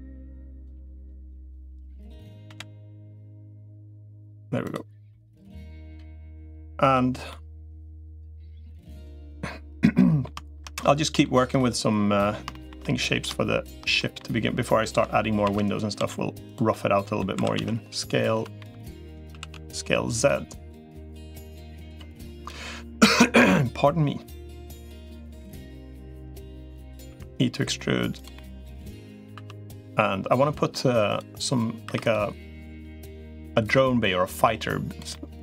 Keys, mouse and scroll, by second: 0.3 click, 0.6 middle click, 2.3 l, 2.6-3.9 middle drag, 4.9 middle click, 5.6 middle click, 7.1 middle click, 8.2 middle click, 8.7 click, 9.8 middle click, 10.5 middle click, 11.3 middle click, 12.3 shift+middle click, 12.6 middle click, 13.8 middle click, 15.3 shift+d, 15.9 s, 16.5 middle click, 17.1 s, 19.1 s, 20.8 middle click, 21.7 click, 24.5 click, 25.1 middle click, 26.1 click, 26.9 e, 28.1 middle click, 29.3 2, 29.5 middle click, 30.2 middle click, 30.9 click, 31.7 3, 32.9 middle click, 33.9-34.9 drag, 34.9 middle click.